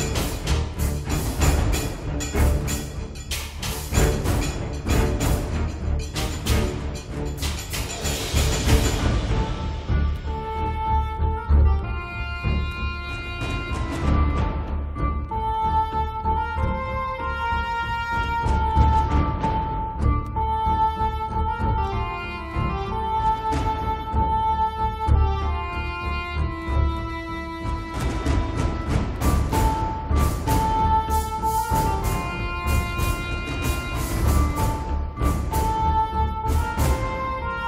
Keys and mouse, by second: 0.2 middle click, 0.3 click, 1.0 middle click, 1.1-2.8 drag, 1.1-2.9 right drag, 2.9 middle click, 3.0 click, 3.0 right click, 3.7 right click, 3.9 middle click, 4.5 click, 5.1 right click, 5.3 middle click, 6.0 KP_Divide, 6.6 g, 6.7 f, 8.0 middle click, 8.2 f, 8.5-9.7 drag, 9.1 right click, 9.7 middle click, 10.2 click, 10.8 middle click, 11.0-12.1 drag, 11.6 right click, 12.3-14.4 drag, 15.5 click, 15.7-17.1 drag, 17.1-18.3 middle drag, 19.2 click, 19.4-20.4 middle drag, 19.6 click, 19.6 right click, 20.4 KP_Divide, 20.5 click, 21.3 click, 22.3 1, 22.5 f, 22.9 click, 23.5-24.8 middle drag, 24.8 click, 24.9-25.9 middle drag, 25.9 click, 26.0 middle click, 26.1-27.1 drag, 27.1 middle click, 27.6 click, 28.8 click, 29.5 click, 31.3 middle click, 31.9 click, 33.0 middle click, 33.2 click, 34.1-35.9 middle drag, 35.7 g, 35.9 f, 36.2 KP_Divide, 36.7-37.6 drag.